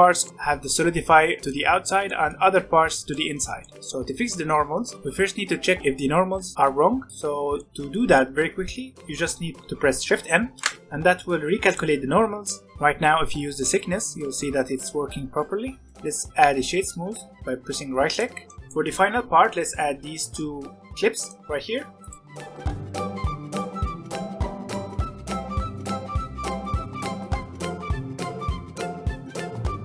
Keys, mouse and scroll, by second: 7.5-10.5 middle drag, 10.5 shift+n, 11.7-12.4 drag, 12.4 middle click, 13.2-15.9 shift+drag, 16.0-18.4 right drag, 18.4-20.9 shift+middle drag, 21.1 shift+middle click, 21.7-22.3 scroll up 3, 21.9 click, 22.3 Tab, 22.4 middle click, 22.5 3, 22.6 click, 22.7 shift+middle click, 23.5 middle click, 23.7-27.5 typing, 25.3 middle click, 25.8 middle click, 27.3 alt+a, 28.0 alt+a, 28.1 ctrl+r, 28.5 middle click, 28.9 ctrl+r, 29.6 click.